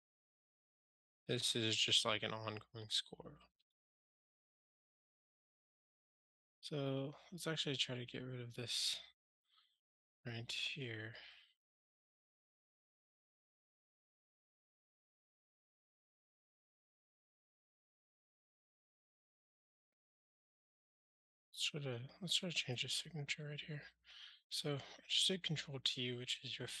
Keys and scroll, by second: 1.0 alt+super+m, 19.0 super+c, 23.4 ctrl+alt+shift+t.